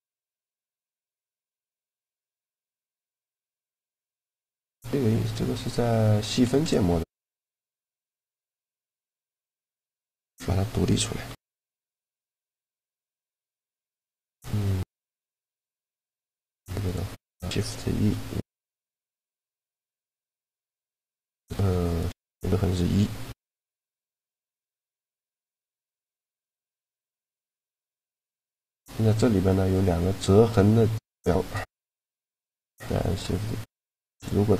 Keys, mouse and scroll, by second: 4.7-8.7 middle drag, 5.9 Tab, 7.3-8.7 drag, 7.3-8.5 right drag, 7.6 Tab, 9.7 ctrl+l, 10.9 p, 12.0 Tab, 12.7-14.3 right drag, 12.9 Tab, 13.7 Tab, 15.0 ctrl+2, 15.6 Tab, 17.4 shift+e, 21.5-23.1 right drag, 22.8 shift+e, 27.0-28.8 right drag, 27.9 click, 28.2 a, 28.8-30.8 middle drag, 31.4-33.3 right drag, 32.4 shift+g.